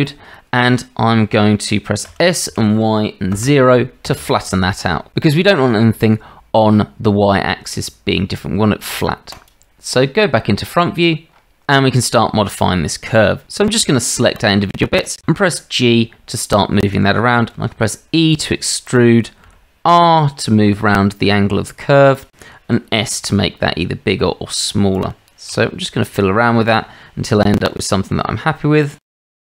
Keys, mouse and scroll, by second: 2.0 s, 14.4 click, 15.2 g, 17.5 e, 19.4 r, 22.7 s, 25.5 r, 27.3 click, 28.8-29.5 typing.